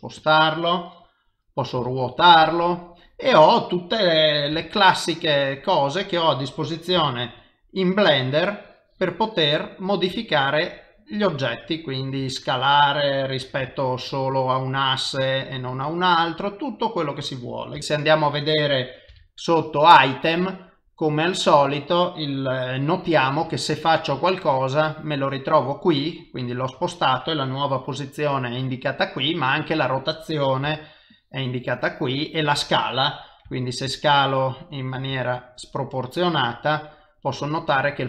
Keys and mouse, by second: 0.9 middle click, 1.8 r, 3.1 middle click, 4.5 g, 5.9 middle click, 7.0 s, 11.5 middle click, 12.2 s, 15.8 middle click, 17.7 g, 19.1 alt+g, 19.1 n, 19.4 a, 20.1 click, 20.6 middle click, 23.4 g, 25.2 middle click, 26.3 middle click, 30.7 r, 33.5 s, 35.1 s, 36.7 middle click.